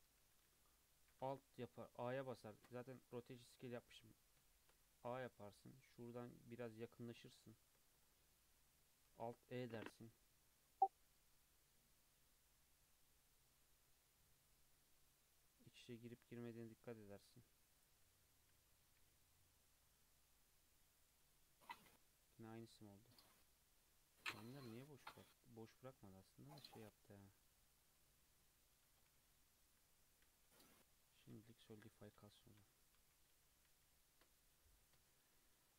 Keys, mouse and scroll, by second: 0.2 3, 1.1 a, 2.2 Tab, 2.5 ctrl+a, 3.4 Tab, 4.2 scroll up 1, 4.5-4.8 shift+middle drag, 4.8 scroll up 2, 5.2-6.4 middle drag, 6.4 scroll up 1, 6.5-9.1 middle drag, 9.1 alt+e, 18.1 Tab, 18.6 alt+z, 19.0 alt+z, 19.3 scroll down 2, 19.5-21.7 middle drag, 21.7-22.1 scroll up 2, 22.1-23.8 middle drag, 23.8-24.3 scroll down 1, 26.0-27.8 middle drag, 27.8 scroll down 2, 28.0-29.2 middle drag, 29.2 ctrl+z, 30.3 ctrl+z, 31.4 ctrl+z, 31.8 ctrl+z, 32.2 ctrl+z, 32.6 ctrl+z, 33.0 ctrl+z, 33.3 ctrl+z, 33.7 ctrl+z, 35.0 Tab, 35.2-35.7 scroll down 2, 35.7 scroll down 2.